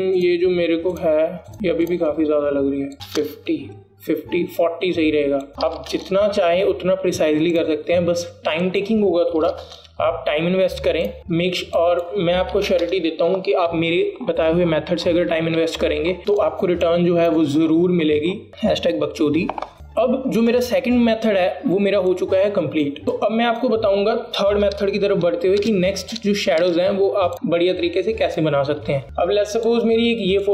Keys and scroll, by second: 4.0 KP_5, 4.1 KP_0, 4.3 Return, 6.8 KP_4, 7.1 Return, 10.5 KP_4, 13.7 KP_4, 14.0 Return, 17.3 alt+space, 26.3 BackSpace, 26.7 BackSpace, 27.2 BackSpace.